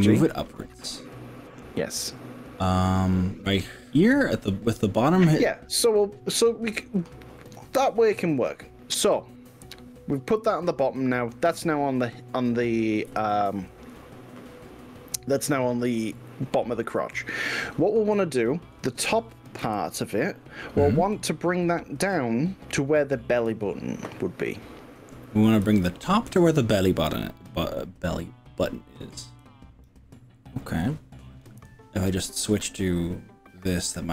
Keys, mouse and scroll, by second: 7.0 click, 7.4-12.4 middle drag, 13.2 KP_1, 14.4-16.1 shift+middle drag, 17.2-17.8 scroll up 2, 18.1 middle click, 19.6 KP_1, 25.6-26.6 drag, 28.6 middle click, 29.4 click, 31.6 KP_5, 32.8-34.1 middle drag.